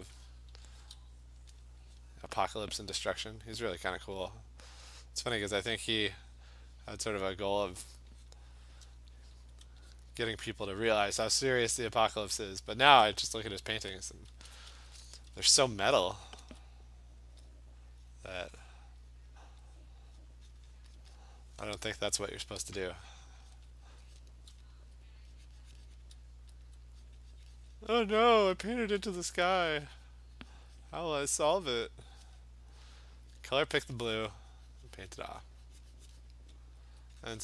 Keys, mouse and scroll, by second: 0.0 click, 0.5 [, 0.8 [, 1.4 click, 1.6 click, 2.0 click, 2.5 click, 2.6 alt+click, 3.8 click, 4.3 click, 4.9 click, 5.4 click, 6.4 click, 6.8 click, 7.3 click, 7.8 click, 8.3 click, 9.4 alt+click, 9.6 alt+click, 10.0 click, 10.4 click, 11.6 click, 12.0 click, 12.3 click, 13.1 click, 14.0 alt+click, 14.6 alt+click, 14.7 ], 15.0 ], 15.2 ], 15.4 ], 15.8 click, 16.5 alt+click, 17.5 click, 18.1 click, 18.7 click, 19.2 click, 19.5 click, 19.6 alt+click, 19.9 click, 20.3 click, 20.4 alt+click, 20.5 click, 20.6 click, 20.8 click, 21.0 click, 21.2 click, 22.2 click, 22.5 click, 23.1 click, 23.6 click, 23.9 click, 24.2 click, 24.8 alt+click, 26.0 click, 26.7 alt+click, 27.1 click, 27.5 click, 27.8 click, 27.9 click, 28.0 click, 28.8 click, 29.4 alt+click, 30.6 click, 30.8 click, 31.9 click, 32.3 click, 32.9 click, 33.5 click, 34.4 click, 35.1 click, 36.3 click, 36.9 alt+click, 37.3 click.